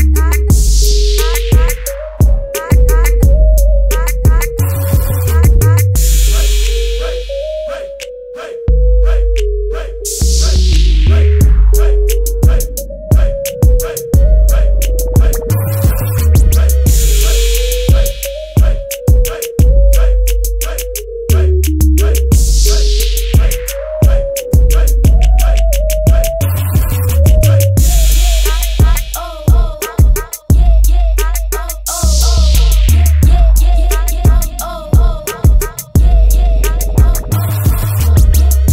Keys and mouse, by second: 0.0 click, 2.1 click, 12.2 click, 13.5-15.0 drag, 17.0-38.7 drag.